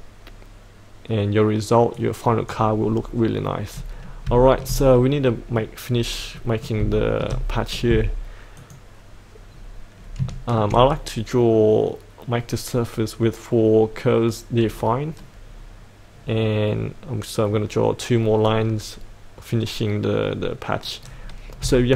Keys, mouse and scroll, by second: 2.0 click, 2.9-3.4 scroll up 1, 3.4 middle click, 4.4 shift+middle click, 5.0 scroll down 1, 5.2 middle click, 5.8-6.4 scroll up 1, 6.4 middle click, 6.9 shift+middle click, 8.6 click, 9.5-10.2 scroll down 1, 10.3 shift+middle click, 15.1-20.1 scroll down 1.